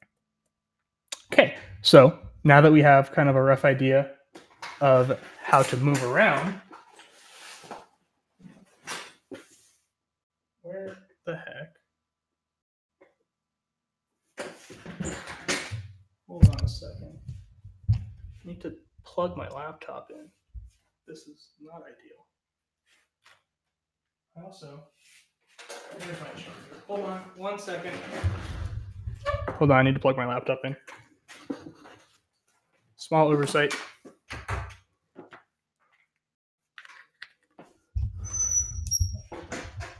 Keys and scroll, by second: 0.0-0.7 typing.